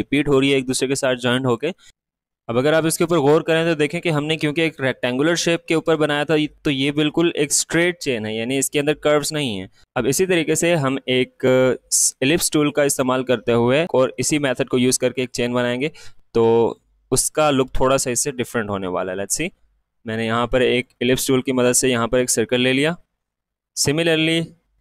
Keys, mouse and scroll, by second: 1.8 click, 1.8 click, 1.9-3.4 alt+scroll up 2, 3.5-5.4 alt+scroll down 2, 8.0 alt+scroll down 1, 9.6 click, 15.6-18.7 drag, 18.7-21.7 drag, 21.7-22.2 alt+scroll up 1, 24.1-24.8 drag.